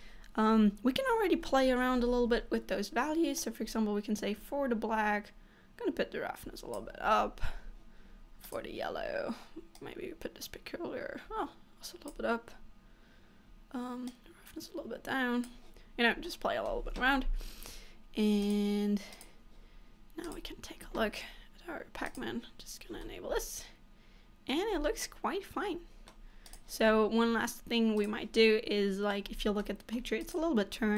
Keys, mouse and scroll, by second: 1.2-1.8 scroll down 1, 2.1-3.5 scroll down 4, 3.5 click, 7.2-8.6 scroll up 4, 8.6 click, 9.9 click, 14.2 click, 16.0-16.4 scroll down 1, 16.4 middle click, 18.6 click, 19.3 click, 20.4 click, 22.3 click, 23.1 middle click, 24.8 scroll down 3, 25.2 middle click, 26.6 click, 28.1 click, 28.4 middle click, 29.4-29.7 scroll up 3, 29.7 middle click, 30.3 click.